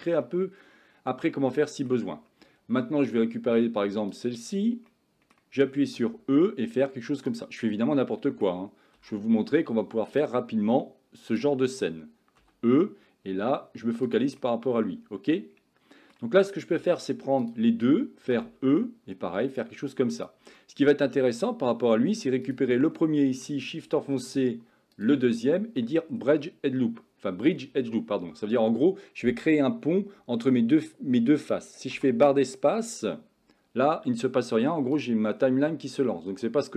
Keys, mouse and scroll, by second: 0.3-1.3 middle drag, 1.6 shift+middle click, 4.9 middle click, 6.0 e, 7.7 middle click, 9.0 e, 12.5 e, 14.4-16.2 middle drag, 18.4 e, 20.6 middle click, 22.9 middle click, 25.4 middle click, 32.0 space, 35.0 click.